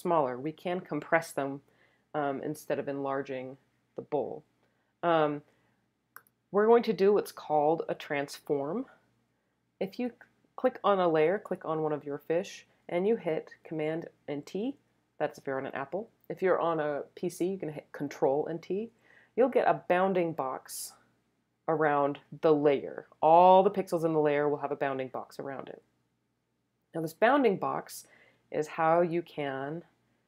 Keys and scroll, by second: 14.3 super+t.